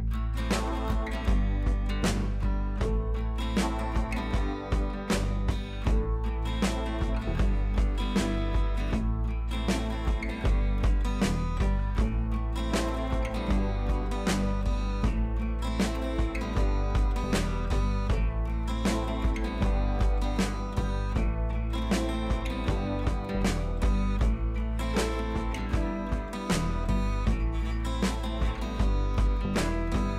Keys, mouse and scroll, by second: 0.4 click, 2.6 click, 5.8-10.2 drag, 18.0-18.3 ctrl+click, 18.9-20.0 drag, 20.7-21.4 click, 22.2 ctrl+c, 22.4 click, 23.1 ctrl+v, 24.0 click, 27.4 ctrl+c, 27.8 click, 28.1 ctrl+v, 29.0 click.